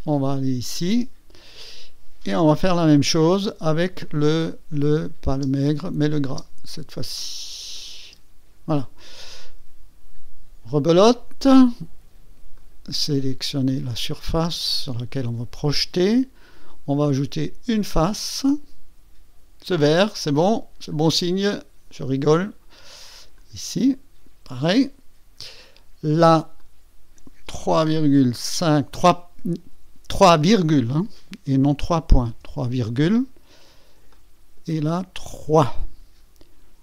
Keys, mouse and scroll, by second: 0.6 click, 0.9 space, 2.6 KP_1, 2.8 KP_2, 5.3 space, 6.0 click, 6.3 space, 7.7 click, 8.1 space, 10.7 click, 12.6 click, 14.3 click, 16.5 click, 18.2 click, 20.9 click, 23.4 click, 24.8 click, 26.6 click, 28.5 KP_3, 31.6 ,, 32.3 KP_5, 34.1 click, 35.4 KP_3.